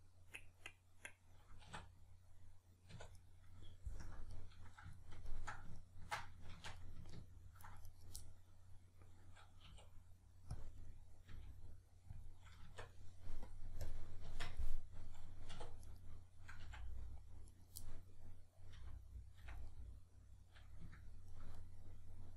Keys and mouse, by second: 1.7 \, 1.7 1, 2.9 \, 4.0 KP_Decimal, 6.5 shift+Tab, 7.9 right click, 8.2-10.6 middle drag, 9.7 e, 10.6 click, 10.9-12.3 middle drag, 11.3 g, 12.3 click, 12.6 Tab, 12.6-13.5 middle drag, 13.5-14.3 drag, 14.3 Tab, 14.6-15.8 middle drag, 15.5 2, 15.8 right click, 16.6 f, 17.5 right click, 17.8-22.3 middle drag, 18.8 f.